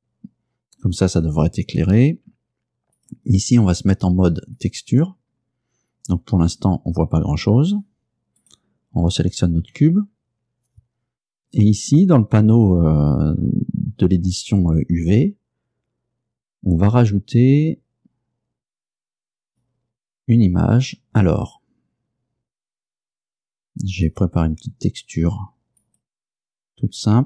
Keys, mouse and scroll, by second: 3.0 click, 4.6 click, 5.4-5.7 scroll up 2, 8.5 right click, 9.7 Tab, 19.5 click, 22.8 click, 24.1 click, 25.9 click.